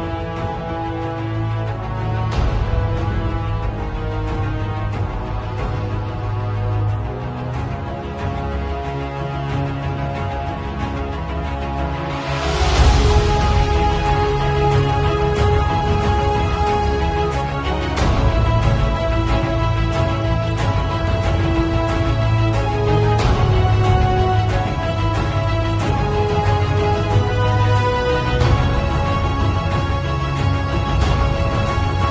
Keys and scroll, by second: 0.2 b, 0.8 ], 8.7 v, 15.1-15.9 typing, 16.1 alt+x, 16.3 alt+Delete, 16.5 alt+x, 16.7 alt+Delete, 17.7 b, 18.0 x, 22.1 x, 24.3 x, 24.5 [, 30.8 ], 32.0 x.